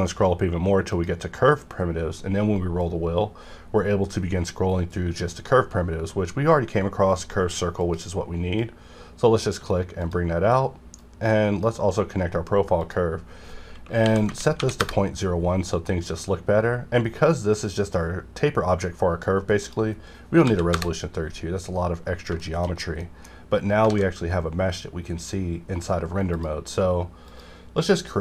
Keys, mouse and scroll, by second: 0.9 click, 2.1-2.9 scroll up 1, 2.9-3.6 scroll down 1, 3.6 scroll up 1, 5.0 scroll down 1, 5.2-7.1 scroll up 1, 7.1-7.7 scroll up 1, 7.8-12.8 drag, 14.0 KP_Decimal, 14.2 KP_0, 14.5 KP_1, 14.8 KP_Enter, 15.7-17.2 scroll up 2, 19.6 click, 20.4 KP_8, 20.7 KP_Enter, 21.7-22.3 scroll down 1, 22.4 shift+middle click, 22.7-23.3 shift+scroll down 3, 23.0 middle click, 23.3-23.8 scroll up 1, 23.8 alt+a, 26.3 click.